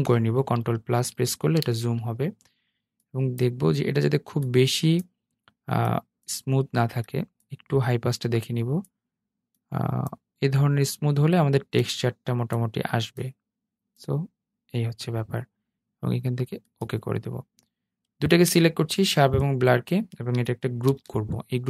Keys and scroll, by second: 0.2 super+=, 19.9 super+g.